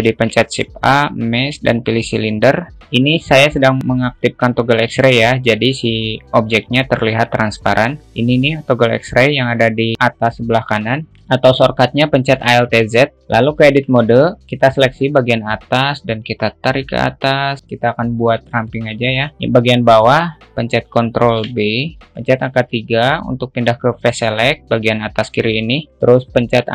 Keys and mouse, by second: 0.6 shift+a, 7.6-8.1 alt+middle drag, 11.8-12.9 alt+shift+middle drag, 13.1 alt+z, 13.3 alt+z, 14.2 Tab, 14.4-15.4 drag, 14.4 a, 16.3-17.9 drag, 19.1 shift+middle click, 19.7 click, 19.7 a, 21.8 ctrl+b, 22.0 alt+middle click, 23.0 3.